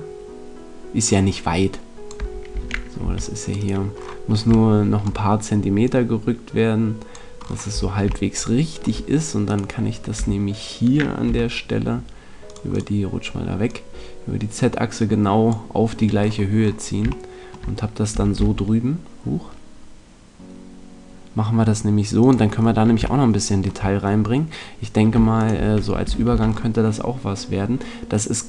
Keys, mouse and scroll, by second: 2.4 a, 3.0 c, 3.6-4.6 right drag, 4.6-5.8 middle drag, 5.8 click, 7.6 middle click, 7.7 a, 9.4-11.3 right drag, 10.1 e, 12.5-15.6 drag, 16.2-21.3 middle drag, 18.1 e, 22.2 click, 24.0 middle click, 25.3-27.2 right drag, 26.0 f, 26.2 a.